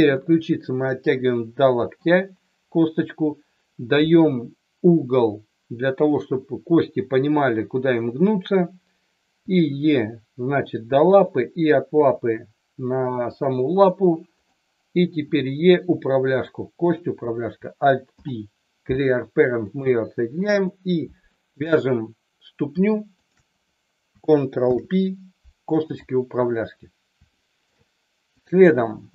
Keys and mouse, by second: 0.1 e, 1.8 click, 9.3 e, 11.1 click, 12.0 e, 13.3 click, 14.4 click, 15.2 e, 16.3 click, 16.9 click, 18.1 alt+p, 20.6 click, 23.1 shift+click, 24.6 ctrl+p, 27.3 shift+middle click, 28.3 click.